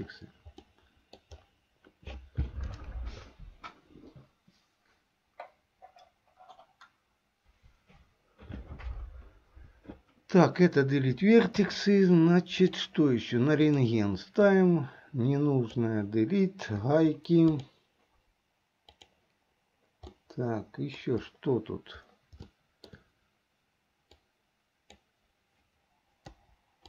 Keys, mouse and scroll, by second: 0.9 middle click, 11.6 KP_3, 12.6 click, 13.8 click, 14.7-15.8 drag, 17.6 Delete, 20.2 middle click, 22.6 shift+middle click, 24.3 click, 26.3 Delete.